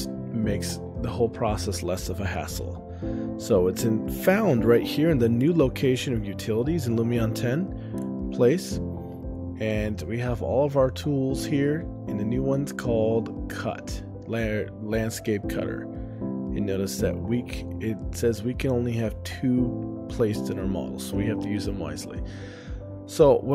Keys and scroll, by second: 7.8-8.6 typing.